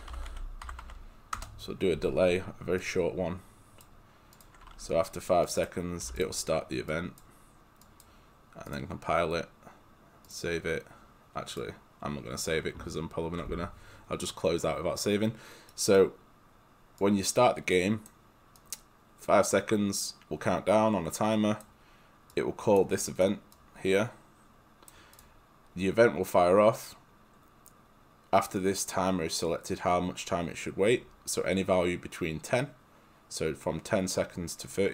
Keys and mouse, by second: 0.0-1.4 typing, 2.8 click, 6.1 5, 6.2 click, 10.5 click, 11.1 click, 11.9 click, 15.7 right click, 17.1 click, 18.1 click, 23.1 right click, 23.6 click.